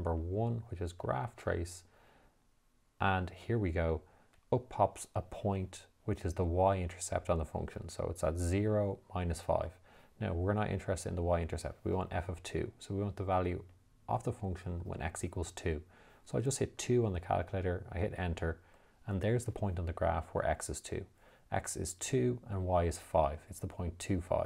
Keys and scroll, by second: 1.3 1, 17.1 2, 18.5 Return.